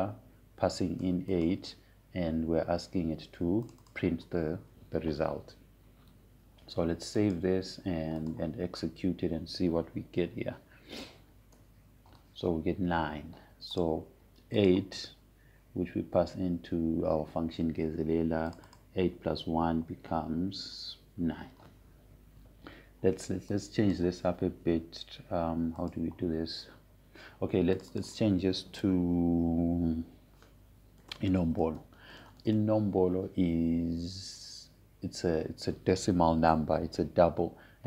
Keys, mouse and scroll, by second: 1.5-3.0 drag, 5.4 click, 8.8 click, 11.8 Up, 14.2 Return, 16.1 click, 20.1 click, 25.2-27.4 drag, 32.5-34.7 typing.